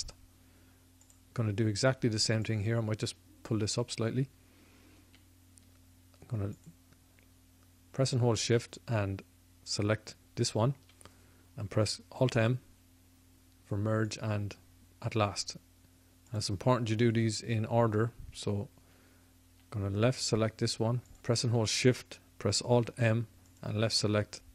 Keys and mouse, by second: 1.0-14.3 drag, 12.3 alt+m, 16.2-23.6 drag, 22.6 alt+m.